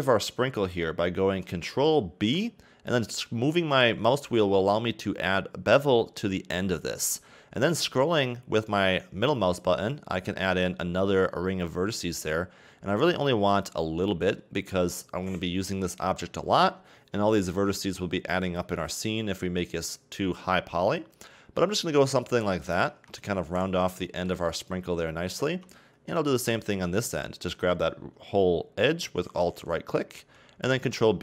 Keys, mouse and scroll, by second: 2.2 ctrl+b, 22.9 a, 23.2 Tab, 23.6-24.0 scroll down 2, 24.0-25.5 shift+middle drag, 25.5 Tab, 26.5-29.5 alt+right drag, 30.2 ctrl+b.